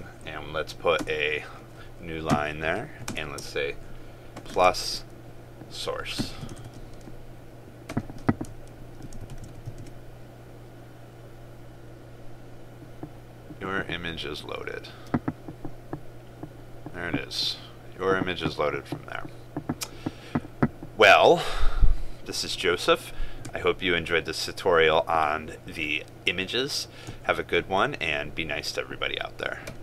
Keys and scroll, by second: 6.7 ctrl+space, 9.3 ctrl+s, 9.9 ctrl+r.